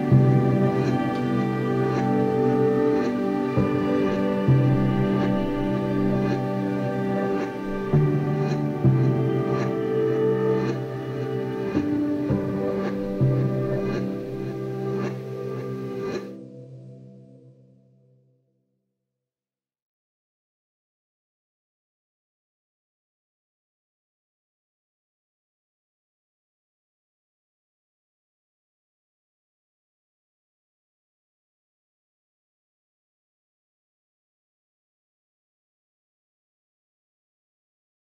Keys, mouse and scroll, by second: 0.8 KP_3, 1.6 scroll down 1, 2.1 g, 5.1 click, 5.1 scroll down 1, 6.3 g, 7.7 click, 8.1 KP_1, 9.3 g, 11.3 click, 12.2 KP_3, 13.1 scroll down 1, 13.7-14.6 scroll up 1, 14.9-17.5 shift+middle drag, 15.5-16.0 scroll up 1, 16.1 g, 17.5 click, 19.2 s, 22.7-23.8 scroll up 2, 23.8 scroll up 1, 24.1-28.0 shift+middle drag, 28.0 click, 31.3 r, 35.2 s.